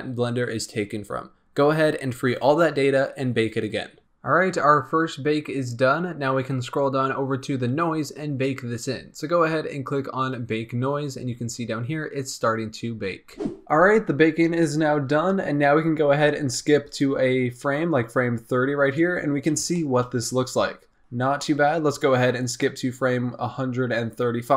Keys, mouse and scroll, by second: 6.0-9.0 scroll down 8, 9.0-9.7 scroll down 2, 10.1-13.6 drag, 17.4-17.8 drag, 19.2-19.7 scroll up 3, 19.7-24.5 shift+middle drag.